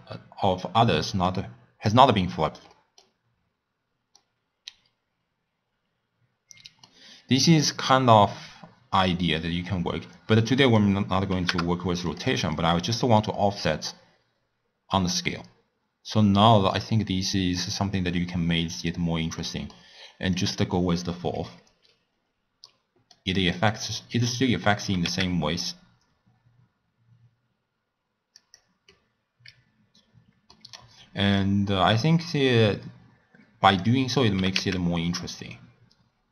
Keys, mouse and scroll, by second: 1.3 click, 2.7-3.2 middle drag, 3.2-4.1 scroll up 1, 4.1-7.1 middle drag, 10.6-12.3 drag, 12.6 click, 13.6-16.7 drag, 19.3-20.3 middle drag, 20.3 click, 22.6-23.6 middle drag, 23.6 click, 24.8 g, 28.9-31.4 middle drag, 31.4-34.4 drag, 34.4 g.